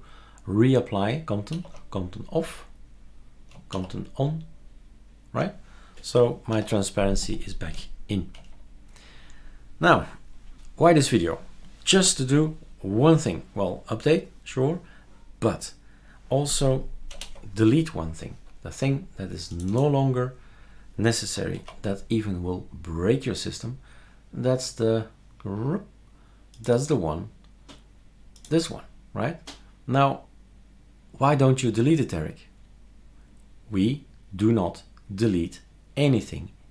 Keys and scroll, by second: 1.5 ctrl+alt+o, 3.7 ctrl+alt+o, 6.5 ctrl+alt+t, 17.1 shift+super+Return, 21.6 super+q.